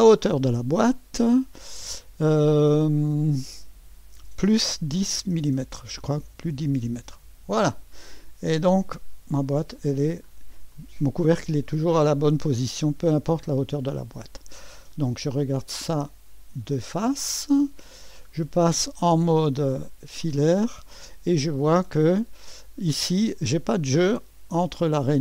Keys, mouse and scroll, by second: 0.0 click, 4.9-6.4 typing, 7.0 Return, 7.9-8.6 typing, 9.3 click, 10.1-10.9 scroll down 1, 10.7-12.1 drag, 11.7-12.1 scroll up 1, 12.1-15.2 typing, 12.8-13.4 scroll down 1, 13.3 click, 13.8-15.2 drag, 17.3-17.8 scroll up 1, 17.8 middle click, 18.0-20.2 typing, 18.7 middle click, 18.9 middle click, 20.8-21.3 scroll up 1, 21.3-21.7 scroll up 1.